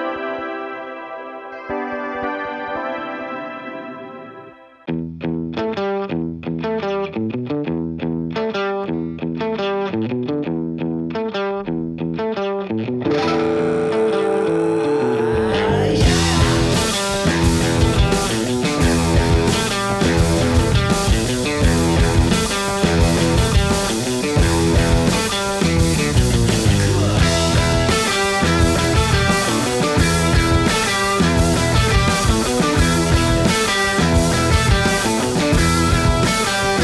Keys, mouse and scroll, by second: 0.1-2.2 drag, 5.9-7.5 scroll up 1, 8.1 click, 11.0 ctrl+space, 11.1-12.1 typing, 12.1 click, 14.8-16.2 typing, 17.6 click, 18.2 typing, 18.4 ctrl+c, 19.5 click, 21.3 ctrl+v, 24.3 click, 24.7-26.7 typing, 26.9 Return, 28.7-34.2 drag, 30.3-30.8 typing, 31.0 Return, 34.9 click, 36.3 Left.